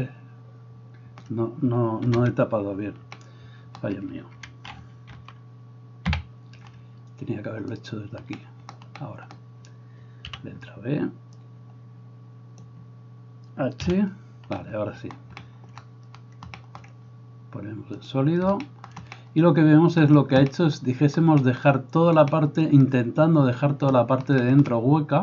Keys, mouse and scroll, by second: 2.1 KP_1, 5.5 alt+h, 6.3 a, 8.0-25.2 middle drag, 10.4 b, 14.1 h.